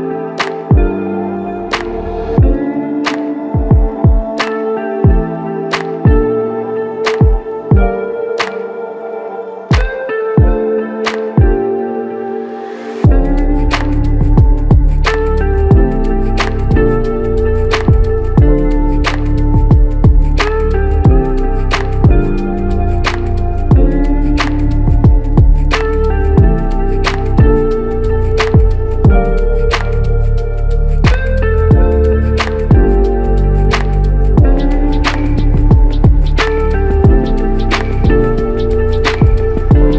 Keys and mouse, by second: 8.3 alt+click, 11.8 alt+click, 13.6 alt+click, 17.3 double click, 19.8 alt+click, 24.5 alt+click, 25.9 alt+click, 31.6 alt+click, 32.9 alt+click, 37.0-37.3 typing, 39.0 right click, 39.8 alt+shift+click.